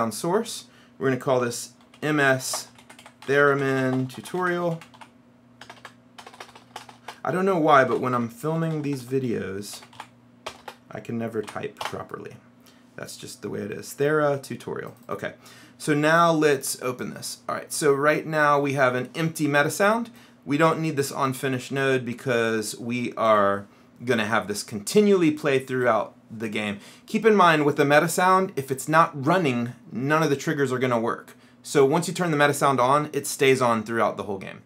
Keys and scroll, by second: 1.3-5.8 typing, 7.8-11.6 typing, 12.0 Return.